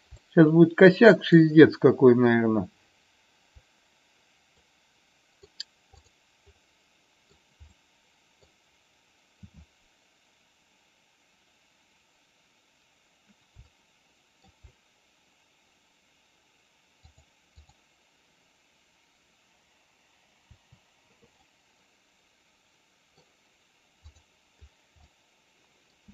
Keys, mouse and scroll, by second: 0.2-1.3 shift+middle drag, 4.6-5.6 middle drag, 5.9 click, 6.7 middle click, 7.8 middle click, 13.7 shift+middle click, 17.1-17.8 drag, 20.4 Delete, 21.3-23.2 middle drag, 24.9 middle click, 25.3-25.8 middle drag.